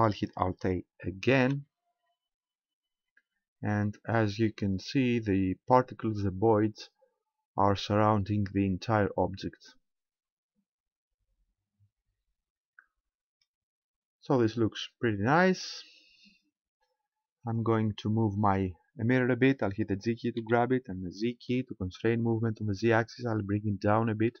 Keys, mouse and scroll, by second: 1.3 alt+a, 15.3 Escape, 17.5 right click, 20.4 g.